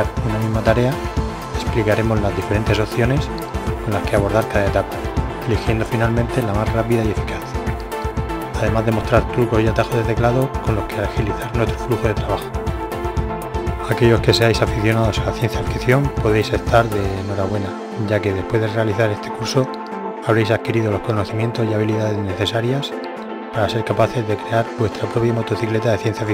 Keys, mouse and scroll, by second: 1.6 KP_1, 3.6-4.4 middle drag, 4.8 middle click, 6.6 r, 13.1-14.7 middle drag, 13.6 g.